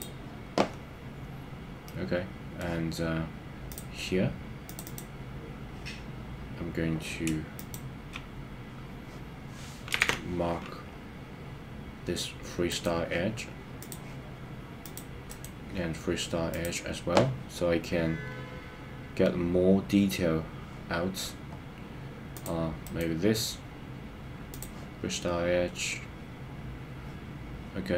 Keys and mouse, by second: 1.8 middle click, 4.6 click, 4.8 click, 10.1 super+z, 12.7-14.1 right drag, 14.8 click, 15.3-16.7 right drag, 22.9-24.7 right drag.